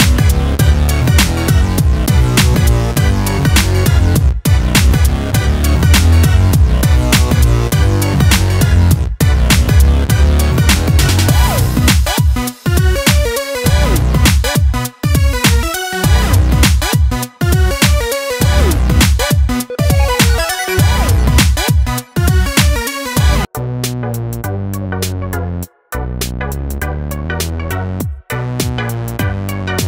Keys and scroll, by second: 24.0 Delete.